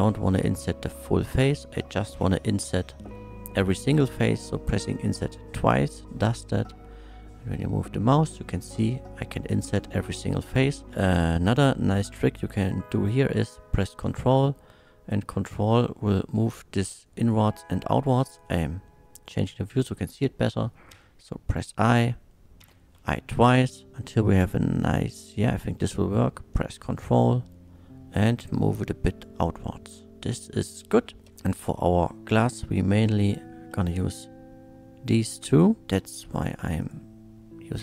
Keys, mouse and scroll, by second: 4.7 i, 17.9 ctrl+right click, 18.4-19.8 ctrl+middle drag, 28.8 ctrl+space, 30.2 middle click, 31.2 KP_1, 32.4 click, 33.2 shift+click, 35.9 k, 36.8 click.